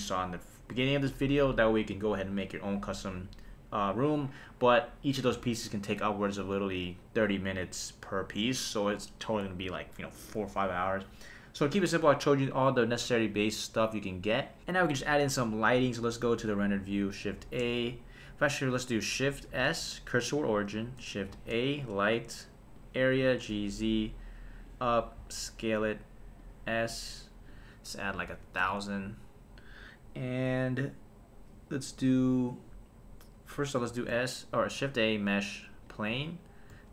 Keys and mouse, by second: 5.9 KP_0, 14.6 click, 16.5 click, 17.4 shift+a, 19.5 shift+s, 21.2 shift+a, 23.2 g, 23.5 z, 24.6 click, 25.2 s, 26.4 click, 27.5-28.6 drag, 28.2 KP_0, 28.3 KP_0, 33.9 shift+a, 36.7 s.